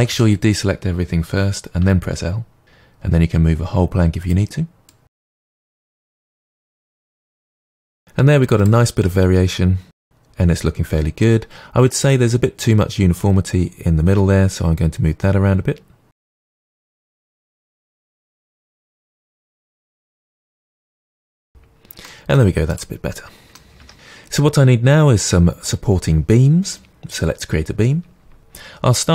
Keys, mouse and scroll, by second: 1.8 l, 2.6 g, 4.3 click, 4.8 click, 5.5 g, 5.8 click, 5.9 g, 6.3 click, 6.5 g, 6.8 g, 7.0 click, 7.2 Tab, 7.3-17.1 middle drag, 7.8 Tab, 7.9 scroll down 2, 16.3 KP_7, 16.6 Tab, 17.1 click, 17.4 middle click, 17.8 click, 18.2 Tab, 18.2 middle click, 18.6 Tab, 18.8 Tab, 19.2 click, 19.4-22.0 typing, 19.8 click, 19.8 click, 20.6 click, 21.5 Tab, 21.6 middle click, 21.7 Tab, 21.9 click, 22.8-23.3 middle drag, 23.1 Tab, 23.2 Tab, 23.3-24.9 drag.